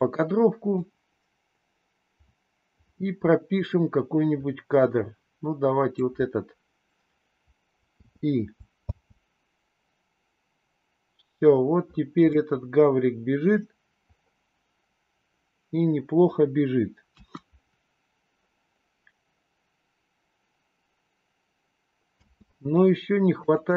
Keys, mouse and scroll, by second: 0.7-6.1 drag, 8.0 i, 8.8 space, 12.3-13.6 middle drag, 17.1 KP_1, 22.2 space, 23.3 click.